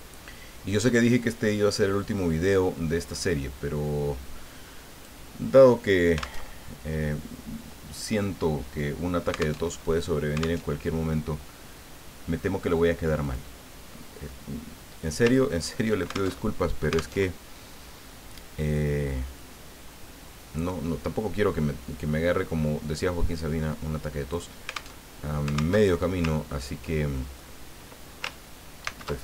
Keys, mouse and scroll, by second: 1.6 click, 2.2-5.2 drag, 6.4 alt+Tab, 9.6 alt+Tab, 10.6 alt+Tab, 13.2 click, 14.3 click, 15.3-15.8 ctrl+scroll up 2, 16.4 ctrl+alt+Tab, 17.2 alt+Tab, 19.4-24.5 drag, 25.0 alt+Tab, 25.8 alt+Tab, 26.4-26.7 ctrl+scroll up 2, 27.1 ctrl+click, 28.8 ctrl+shift+c.